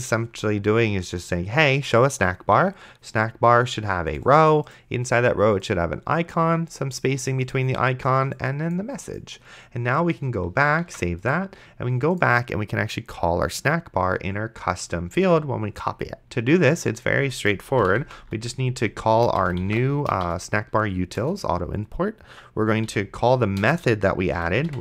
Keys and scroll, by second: 11.1 ctrl+s, 17.7-20.5 typing, 21.2 Return, 22.9-24.8 typing.